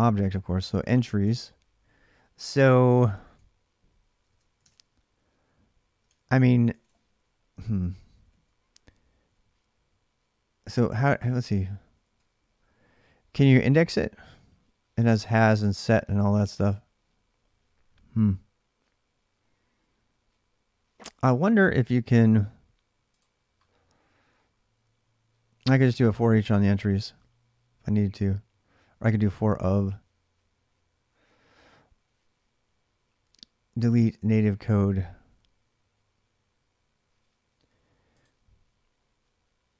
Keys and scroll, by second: 1.0 alt+Tab, 2.9 ctrl+[, 2.9 j, 3.1-3.6 j, 4.0 Tab, 5.8 alt+Tab, 6.5 ctrl+[, 6.5 ctrl+j, 7.5 k, 7.7 k, 10.8 alt+Tab.